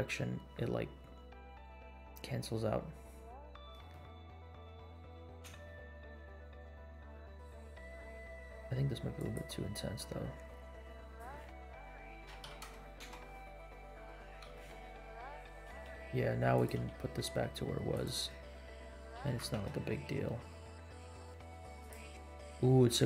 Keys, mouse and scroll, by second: 1.2 scroll down 2, 2.2 scroll up 2, 2.8-3.4 scroll up 1, 3.4 scroll down 2, 3.9-4.3 shift+middle drag, 4.8-5.4 scroll down 4, 5.6 space, 7.9 scroll down 1, 9.2 click, 11.0-13.2 drag, 14.2 space, 14.6-15.3 middle drag, 15.6 r, 16.7 g, 18.3 middle click, 19.1 g, 22.5 scroll up 3.